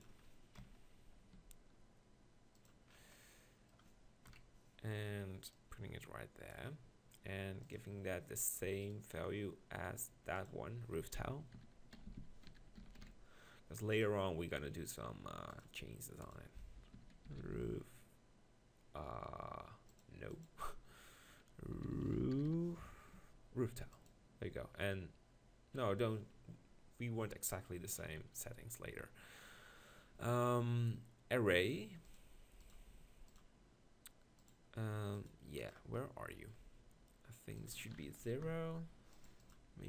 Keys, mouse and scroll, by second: 0.6 ctrl+KP_Decimal, 1.4 g, 4.3 KP_1, 12.1 o, 14.6 click, 17.4 o, 22.5 o, 36.2 middle click.